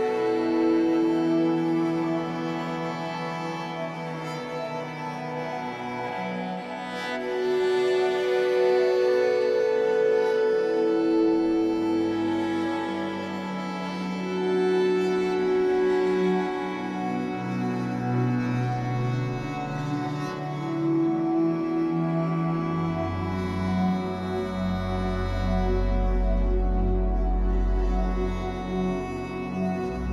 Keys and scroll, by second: 0.2 alt+c, 2.2 Escape, 2.5 3, 3.1 shift+Tab, 3.8 2, 8.0 Escape, 8.3 3, 9.8 l, 10.5 b, 15.7 Escape, 16.3 3, 17.1 shift+Tab, 17.6 Escape, 21.2 3, 23.3 l, 24.1 shift+w, 24.9 Escape.